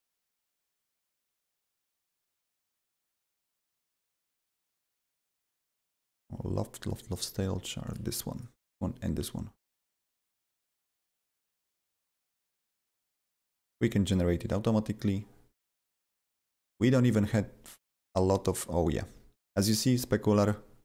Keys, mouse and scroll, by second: 7.8 click, 7.8 click, 8.3 ctrl+click, 9.8 ctrl+double click, 11.5 ctrl+double click, 14.0 ctrl+double click, 15.6 ctrl+double click, 16.8 scroll down 2, 18.3-20.1 scroll down 2.